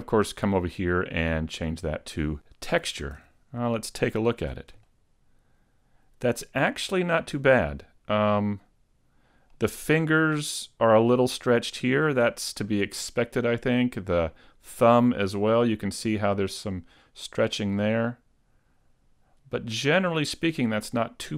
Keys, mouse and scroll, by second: 0.2 click, 3.1 a, 3.7 middle click, 4.4 Tab, 4.9 middle click, 10.1 middle click, 11.8 middle click, 12.7 middle click, 14.7 middle click, 16.0 middle click, 17.7-18.1 scroll up 1, 18.1 middle click, 20.1-20.5 scroll down 1, 20.5 middle click.